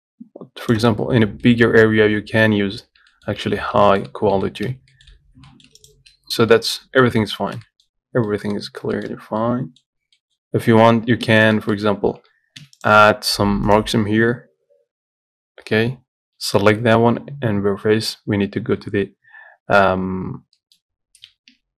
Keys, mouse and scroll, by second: 1.3-1.7 scroll down 1, 1.7 middle click, 1.9-2.2 scroll up 3, 2.2-2.8 scroll down 1, 2.8-4.7 scroll down 1, 4.7-6.8 scroll down 1, 6.8 middle click, 7.4 scroll up 1, 7.6 shift+middle click, 8.3 scroll down 1, 8.5 middle click, 8.9 scroll up 1, 9.2 shift+middle click, 10.1-10.4 scroll down 1, 10.4 middle click, 11.1-11.5 scroll down 2, 11.5 Tab, 11.8 middle click, 12.1 scroll up 1, 12.8 3, 21.0 middle click.